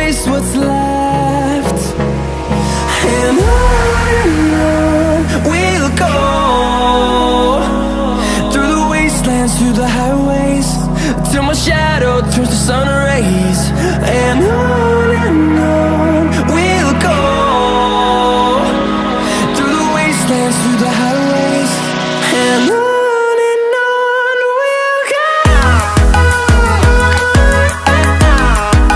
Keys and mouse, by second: 0.2 Tab, 0.6 middle click, 1.8 shift+middle click, 3.7 click, 5.2 x, 6.5 click, 8.0 shift+click, 8.6 Tab, 11.3-14.6 drag, 15.6-16.9 drag, 17.6 click, 19.1 click, 22.2 shift+a, 26.6 g, 27.0 z, 27.7 1, 28.5-28.9 middle drag.